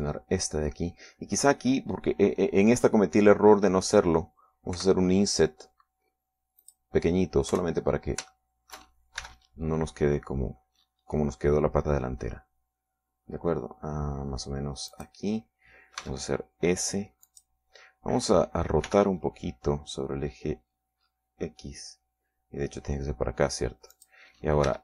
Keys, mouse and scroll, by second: 0.5 ctrl+Tab, 0.8 click, 1.3 right click, 6.3 i, 8.2 click, 9.1 KP_3, 9.9 shift+middle click, 10.8 shift+e, 16.5 click, 17.6 s, 18.8 click, 20.4 r.